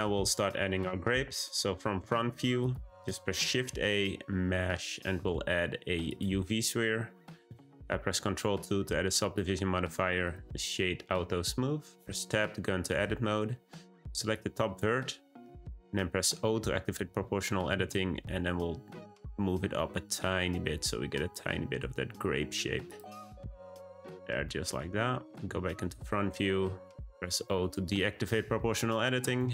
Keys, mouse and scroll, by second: 2.6 click, 2.8 shift+a, 8.1 ctrl+2, 9.2-12.0 right drag, 12.0 Tab, 12.4-14.0 middle drag, 14.0 1, 14.3 click, 16.3 o, 17.6 g, 24.4 middle click, 27.3 o, 29.3 a.